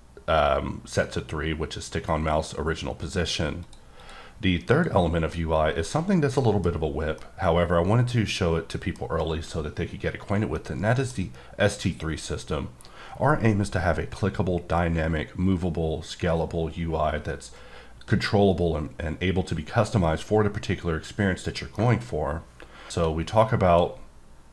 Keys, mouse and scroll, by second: 3.6 click, 4.0 click, 4.7 click, 5.3 middle click, 6.7 scroll down 1, 7.2 middle click, 10.5 middle click, 11.1 scroll up 1, 21.7 middle click, 22.9 q, 23.7 click.